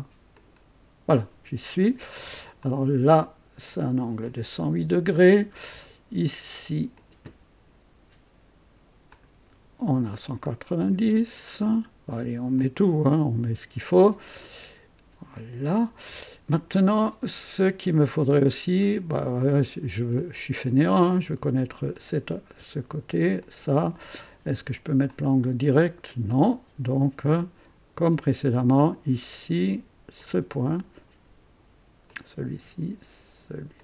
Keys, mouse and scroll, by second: 0.3 ctrl+click, 2.6 click, 4.2-5.2 drag, 6.9 click, 9.0 click, 10.4-11.1 drag, 12.5 click, 13.8 click, 15.3-16.2 drag, 17.0-17.7 scroll up 3, 18.5 scroll up 2, 20.1 click, 21.9 click, 23.4 ctrl+click, 25.0 click, 26.3 click, 28.7 click, 30.1 click, 32.0 click, 33.7 ctrl+click.